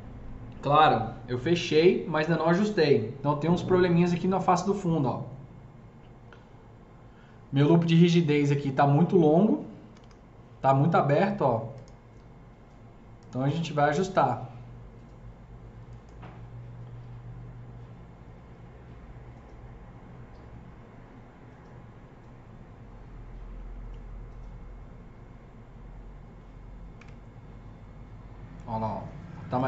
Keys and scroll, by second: 9.6 F3, 9.9 F3, 9.9 F4, 27.0 KP_0.